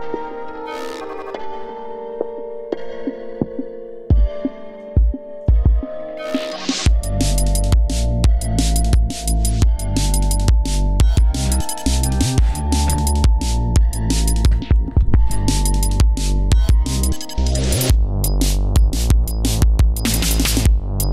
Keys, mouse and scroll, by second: 1.3 scroll down 2, 3.4 ctrl+scroll up 2, 5.7 ctrl+scroll up 2, 7.1 ctrl+scroll down 2, 8.3-8.9 scroll down 4, 9.0-9.7 scroll up 5, 9.7-10.9 ctrl+scroll down 6, 12.0 ctrl+scroll up 2, 12.9 click, 15.1 ctrl+scroll up 2, 17.3 ctrl+scroll up 2, 19.0 ctrl+scroll down 2, 19.5 ctrl+scroll up 2.